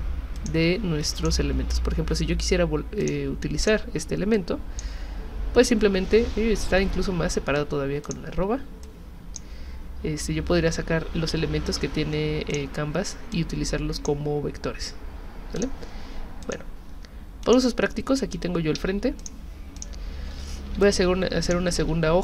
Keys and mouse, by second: 0.4 click, 1.2 click, 3.0 click, 3.6 click, 4.4 click, 6.9 ctrl+z, 8.0 shift+click, 8.8 click, 11.7 ctrl+z, 12.5 click, 13.3-14.1 drag, 15.6 click, 16.4 click, 17.4 click, 18.8 z, 19.2 alt+click, 19.8 alt+click, 20.7 h, 20.8 click, 21.8 v.